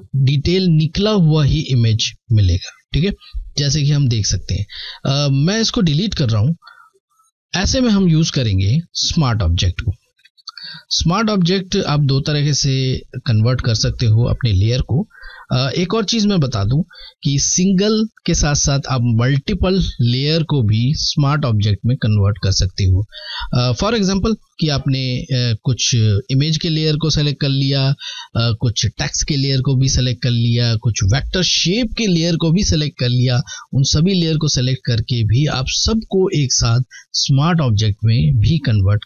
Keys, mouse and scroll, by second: 2.4 scroll down 2, 3.8 alt+scroll down 1, 5.4 Delete, 7.1 click, 9.2 ctrl+d, 9.4 typing.